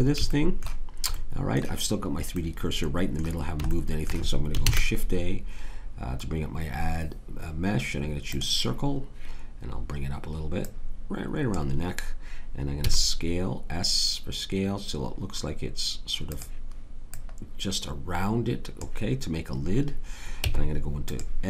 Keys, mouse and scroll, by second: 4.6 shift+a, 10.5-12.8 drag, 12.8 s, 20.4 Tab.